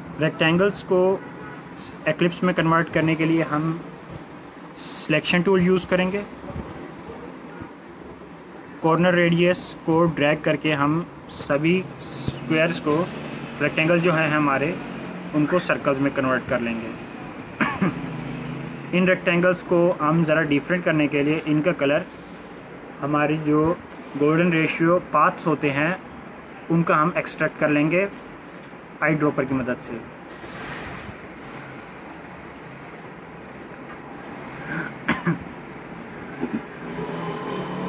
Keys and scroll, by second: 0.7 ctrl+z, 11.4 ctrl+a, 34.2 ctrl+=, 34.4 ctrl+=, 34.5 ctrl+=.